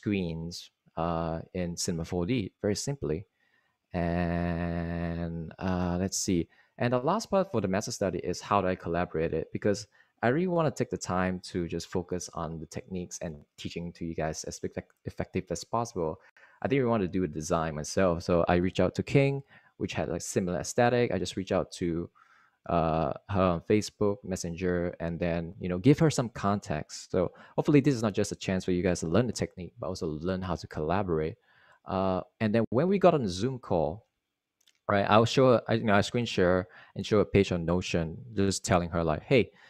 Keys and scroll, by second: 32.5 Right.